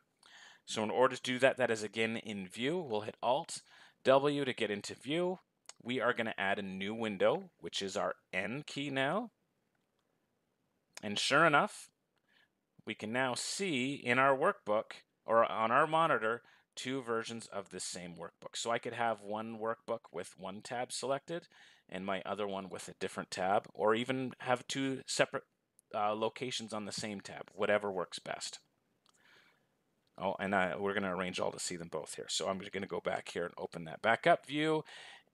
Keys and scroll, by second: 3.5 alt+n.